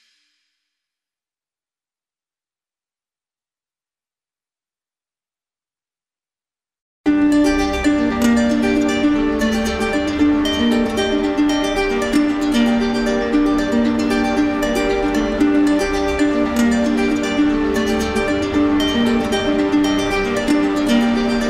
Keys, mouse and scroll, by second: 8.9 alt+right click, 9.9 right click, 12.3 right click, 12.9 alt+right click, 18.0 alt+right click, 18.8 alt+right click.